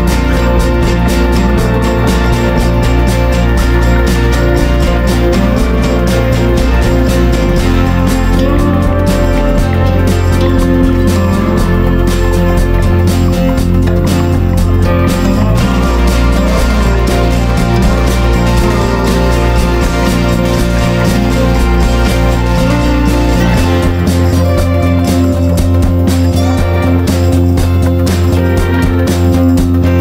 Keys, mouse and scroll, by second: 0.2 right click, 1.2 ctrl+z, 1.8 click, 2.9-6.0 drag, 6.5 ctrl+d, 6.7-14.7 drag, 15.1 shift+click, 17.5 ctrl+g, 18.1 ctrl+d, 18.5-20.3 drag, 23.6 ctrl+shift+g, 24.3 click, 24.8 ctrl+shift+g, 25.7 click, 26.5 shift+click, 27.5 shift+click, 28.5 click.